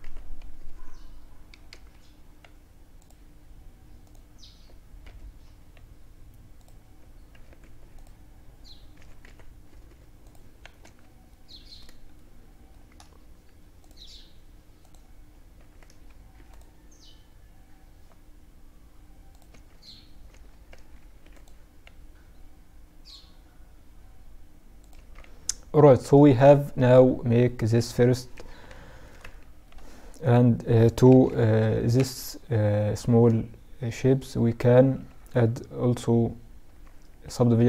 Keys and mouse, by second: 4.0 x, 6.6 ctrl+r, 9.8 Tab, 10.3-11.2 middle drag, 11.2 drag, 11.2 middle drag, 14.4 Tab, 15.2 ctrl+r, 18.6 Tab, 19.3 Tab, 20.0 ctrl+r, 23.9 Tab, 24.4-29.2 middle drag, 29.2-30.0 right drag, 30.0 middle click, 30.1 KP_Add, 30.3 KP_Add, 30.8-31.8 drag, 32.9-35.2 drag, 36.6-37.6 drag.